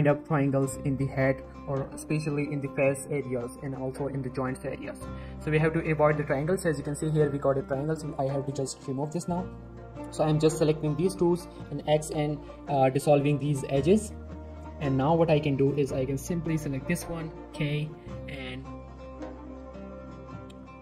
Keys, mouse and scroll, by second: 1.2 scroll up 1, 1.4 scroll down 1, 1.5 shift+middle click, 1.8 middle click, 2.8 scroll down 1, 3.0 middle click, 3.5-4.2 shift+scroll up 2, 4.2 scroll down 1, 4.3 middle click, 5.1-5.9 scroll up 1, 5.9 middle click, 6.7 shift+middle click, 7.1 click, 7.4 middle click, 7.6 shift+middle click, 7.8-8.4 shift+scroll up 1, 10.5 shift+click, 11.8-12.7 typing, 13.6 middle click, 15.1 click, 17.0 k, 17.5 click.